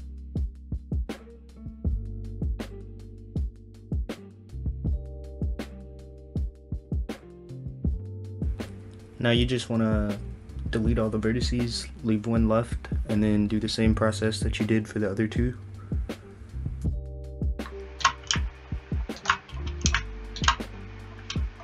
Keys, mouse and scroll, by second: 1.5 click, 2.1 click, 3.9 shift+click, 4.4 shift+click, 5.6 x, 6.4-6.9 scroll up 2, 6.9 click, 7.9 g, 14.2 ctrl+right click, 14.6 shift+middle click, 15.7 ctrl+right click, 16.7 ctrl+right click, 17.3 ctrl+right click, 17.6 shift+middle click, 19.2 ctrl+right click, 19.6 scroll down 4, 20.0 shift+middle click, 21.3-21.6 scroll up 1.